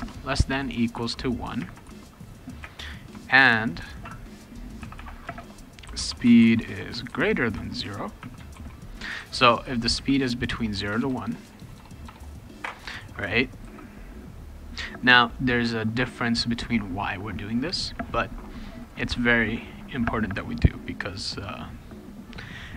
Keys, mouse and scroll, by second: 0.0-2.6 typing, 4.8-8.2 typing, 8.5 ctrl+s, 10.5-12.6 typing, 22.1 click.